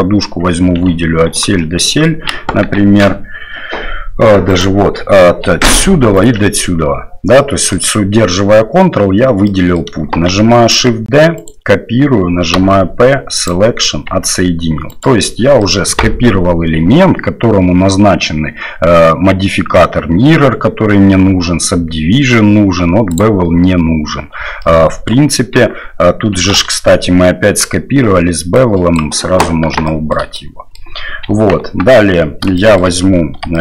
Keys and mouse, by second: 1.4 ctrl+click, 1.8 click, 2.4 KP_1, 2.8 KP_3, 4.5 right click, 7.5 middle click, 9.5 middle click, 10.3 shift+d, 12.5 p, 14.1 Tab, 14.9 right click, 15.7 middle click, 23.1 click, 24.6-25.1 middle drag, 25.5 Tab, 26.5 a, 28.6 click, 29.8 shift+middle click, 30.3 middle click, 31.2 KP_1, 31.5 KP_3, 32.5 shift+click, 33.5 shift+click.